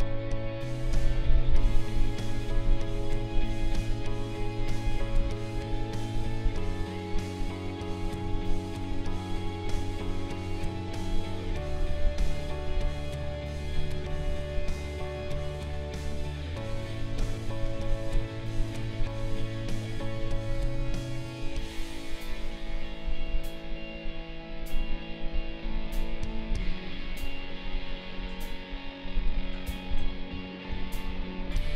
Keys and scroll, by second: 30.0 ctrl+z.